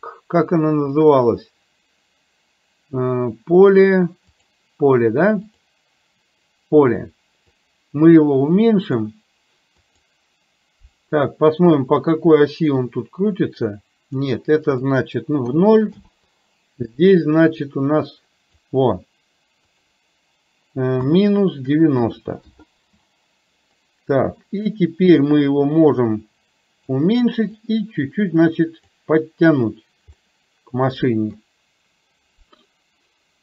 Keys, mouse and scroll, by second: 5.6 click, 7.7-9.1 drag, 9.9-12.2 drag, 12.8-14.2 drag, 14.7-16.1 drag, 16.9-18.6 drag, 19.7-22.6 drag, 25.9-26.9 drag, 27.4-28.9 drag, 30.3-31.4 middle drag.